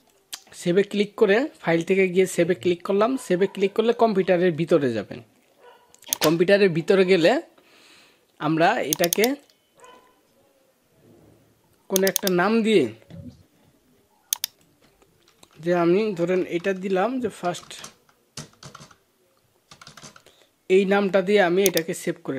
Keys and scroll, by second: 16.0 BackSpace.